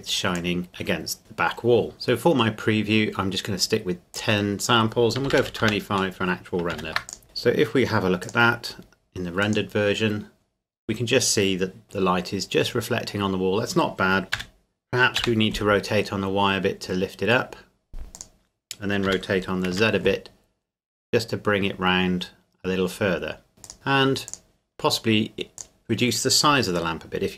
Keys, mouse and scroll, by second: 1.9-3.2 scroll up 1, 4.1 click, 5.3 KP_2, 5.4 KP_5, 5.6 KP_Enter, 6.7 ctrl+s, 7.1 click, 7.2 middle click, 8.2 click, 14.3 r, 15.2 y, 18.1 click, 19.1 r, 19.7 z, 23.6 z, 23.9 click, 24.9-25.6 scroll up 1, 25.6 click.